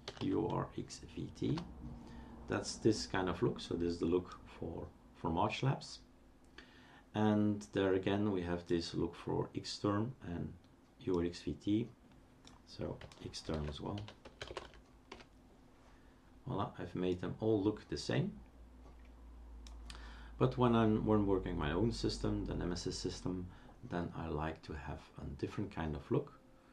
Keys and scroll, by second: 0.0-0.7 typing, 1.5 Return, 13.5 shift+super+d, 13.7-15.1 typing, 15.1 Return.